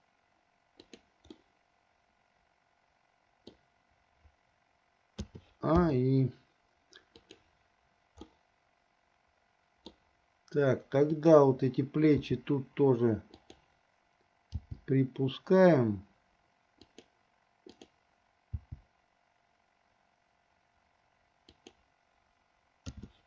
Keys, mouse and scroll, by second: 1.6-4.0 middle drag, 5.5 a, 6.2 i, 7.5 click, 8.5-10.2 middle drag, 11.4 click, 12.5 r, 14.8 g, 17.9 click, 18.7 g, 23.1 a.